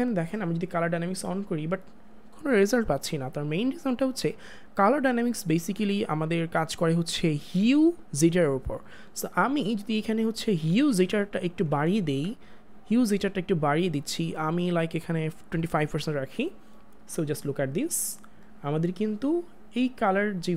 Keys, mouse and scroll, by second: 11.0 ctrl+z, 11.7 ctrl+z, 12.9 click.